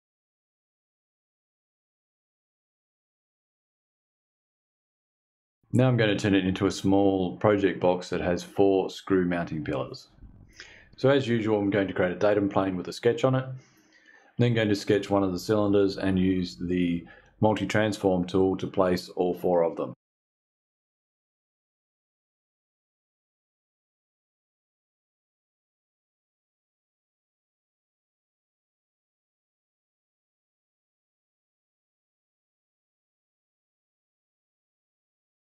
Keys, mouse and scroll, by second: 0.1 ctrl+click, 0.3 ctrl+click, 0.6 ctrl+click, 0.8 ctrl+click, 1.1 ctrl+click, 1.3 ctrl+click, 1.6 ctrl+click, 1.9 click, 2.3 click, 3.1 shift+click, 3.8 click, 4.3 click, 4.4 f, 4.6 ctrl+s, 10.7 click, 20.0 click, 20.4 click, 20.8 click, 20.9 BackSpace, 21.3 click, 21.5 click, 21.8 click, 22.2 click, 22.4 click, 22.5 click, 22.9 click, 23.1 ctrl+click, 23.5 shift+v, 24.0 KP_2, 24.2 KP_Enter, 24.5 click, 25.0 click, 25.3 ctrl+click, 25.7-27.7 typing, 27.3 click, 28.1 click, 28.6 click, 28.9 click, 29.4 6, 29.9 click, 30.2 click, 30.6-31.0 scroll up 2, 31.1 click, 31.4 click, 31.5 click, 32.0 click, 32.3 3, 33.0 click, 33.3 click, 34.0 click, 34.8 KP_4, 35.0 BackSpace, 35.3 KP_2.